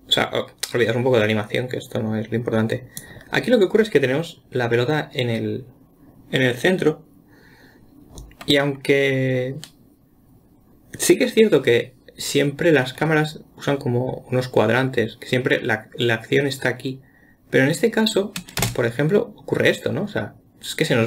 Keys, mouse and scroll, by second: 9.2-10.3 scroll up 1, 10.3-12.2 scroll up 1, 19.0 space.